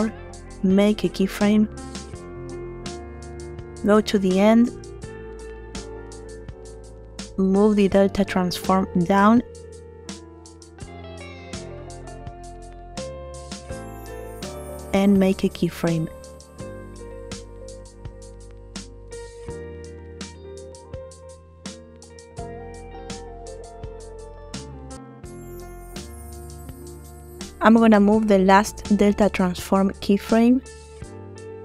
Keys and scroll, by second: 1.8 i, 8.3 0, 8.5 Return, 12.8 0, 13.2 Return, 14.7 |.